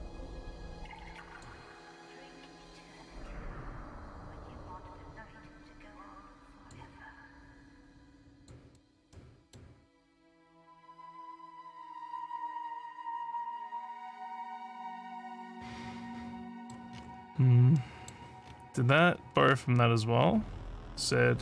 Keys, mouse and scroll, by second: 0.3-1.5 drag, 2.8-6.7 drag, 7.3-8.5 drag, 8.8 click, 9.1 middle click, 10.6-16.7 middle drag, 16.9 scroll up 1, 17.3 scroll down 1, 17.7 middle click, 18.4 scroll down 1, 18.4 scroll down 1, 18.5 scroll, 19.3 scroll, 19.4 scroll.